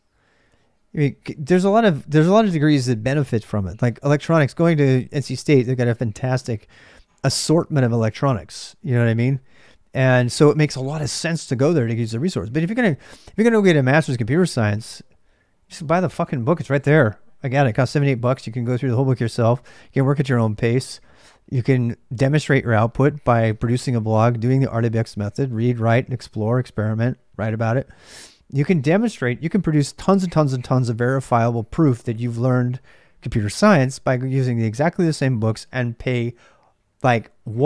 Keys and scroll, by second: 0.0-37.6 typing.